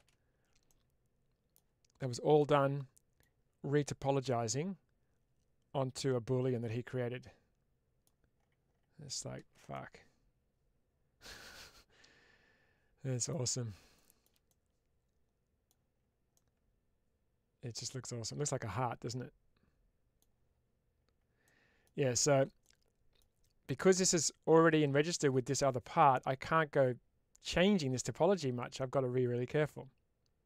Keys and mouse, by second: 0.5-1.4 middle drag, 2.2-3.0 middle drag, 3.8-7.9 middle drag, 9.2 shift+space, 9.6-13.2 middle drag, 14.3-15.5 middle drag, 16.2-20.0 middle drag, 21.3-21.7 middle drag, 22.5-23.0 middle drag, 28.7-30.4 middle drag.